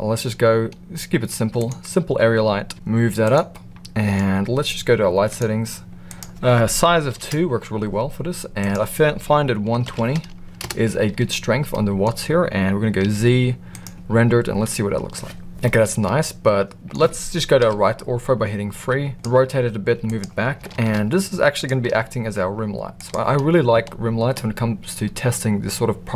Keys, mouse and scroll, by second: 2.7 g, 3.5-4.1 middle drag, 5.2 click, 6.1-7.7 drag, 8.5-11.1 drag, 11.7 middle click, 13.0 z, 15.6-16.9 middle drag, 17.5 KP_3, 18.9 r, 19.4 g, 20.7 shift+d, 21.9 r.